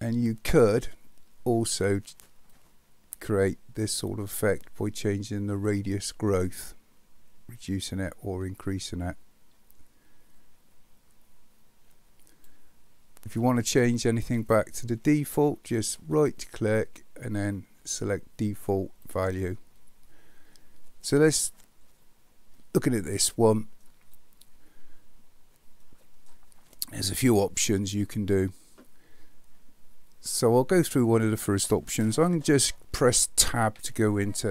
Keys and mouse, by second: 2.6-12.5 drag, 16.2-19.4 right drag, 22.6-23.8 middle drag, 25.8-26.3 middle drag, 33.7 Tab.